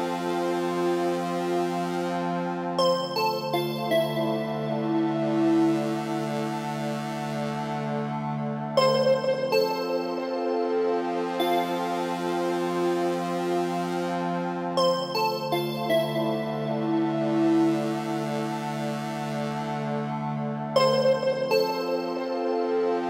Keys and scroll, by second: 2.1 Left, 12.4 Down.